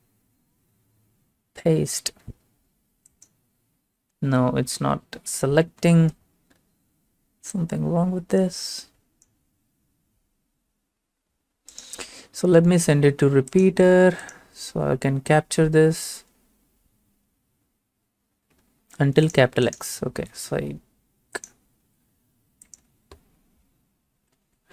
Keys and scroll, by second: 4.8 ctrl+a, 5.0 BackSpace, 5.4 alt+Tab, 21.8 alt+Tab, 24.2 ctrl+v.